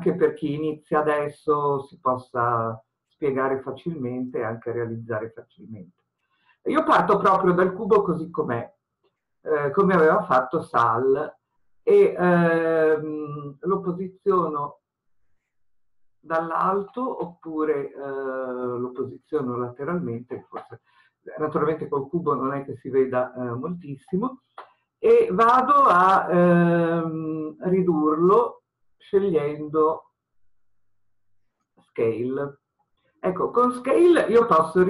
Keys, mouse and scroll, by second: 15.4 click, 19.4 click, 31.6 click.